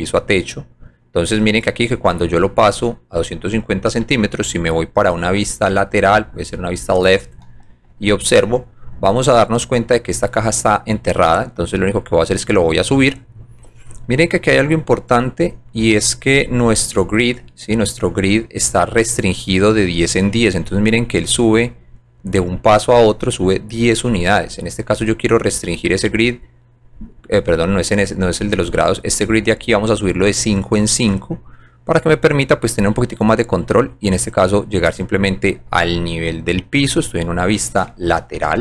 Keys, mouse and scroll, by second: 2.4 alt+middle click, 2.8 alt+click, 4.2 alt+click, 5.4 click, 6.7 click, 7.3-7.9 scroll down 3, 8.9 scroll up 1, 9.3 right click, 10.0 scroll down 1, 10.4 scroll up 2, 11.6-12.7 drag, 14.2 right click, 15.1 right click, 17.7 right click, 18.2 scroll down 2, 18.5 right click, 19.1 click, 20.2 scroll up 1, 21.5 scroll down 1, 21.9 right click, 22.8 scroll up 1, 23.4 right click, 25.0 click, 27.5 click, 28.3 click, 29.1 click, 29.9 click, 30.5 right click, 32.1-33.3 drag, 36.5 scroll down 1, 36.9 middle click.